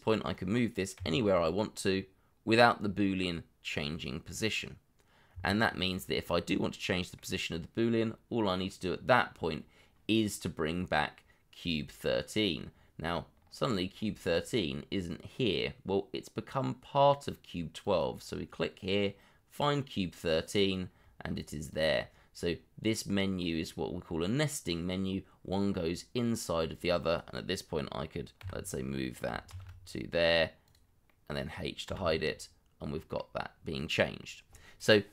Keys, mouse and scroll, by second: 0.9 g, 5.3 Escape, 6.8 middle click, 12.7-13.3 scroll down 1, 13.3-14.3 scroll up 1, 14.3-16.4 scroll down 1, 25.8 middle click, 28.4 g, 29.5 shift+z, 31.0 middle click, 31.8 h, 32.2 middle click, 33.5-33.9 scroll down 1, 33.9 middle click.